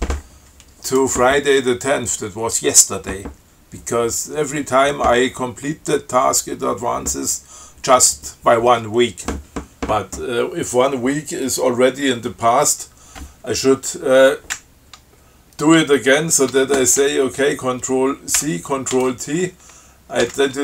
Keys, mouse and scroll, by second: 18.6 ctrl+c, 19.2 ctrl+t, 20.5 d.